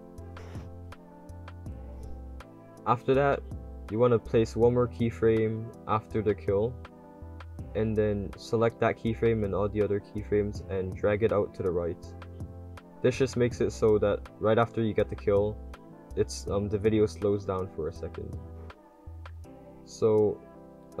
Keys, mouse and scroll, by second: 2.1-3.3 drag, 3.3 click, 10.1-11.6 drag, 11.6 right drag, 12.4 right drag, 12.7-14.4 typing, 13.0 click, 14.0 click, 18.6-21.0 typing, 19.0 click, 19.6 click, 20.0 click.